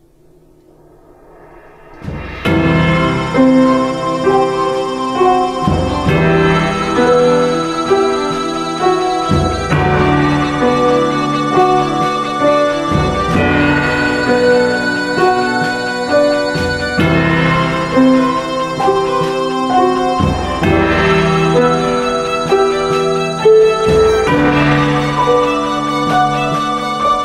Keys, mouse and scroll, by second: 10.4 p, 11.0 p.